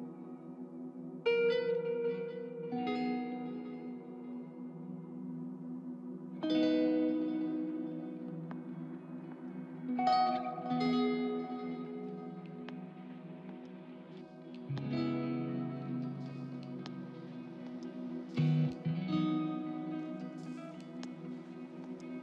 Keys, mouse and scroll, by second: 8.0 middle click, 13.5 middle click.